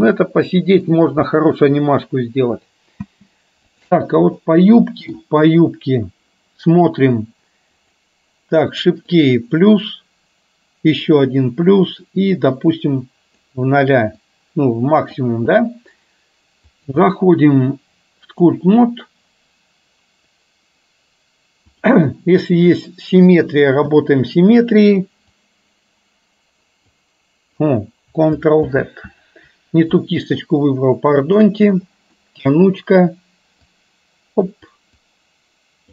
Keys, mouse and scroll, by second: 0.1-1.1 middle drag, 1.4-2.3 middle drag, 3.1 space, 4.4-5.3 middle drag, 8.0 click, 9.3 click, 11.1-11.6 drag, 12.9 click, 14.4 click, 16.9-18.6 drag, 25.5-27.0 drag, 28.8 ctrl+z, 31.4 click, 32.1 middle click, 33.8 click, 35.3 click.